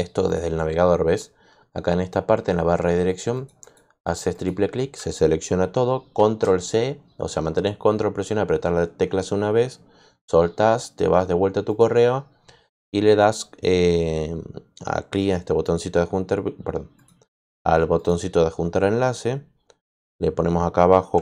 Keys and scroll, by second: 6.1 ctrl+c.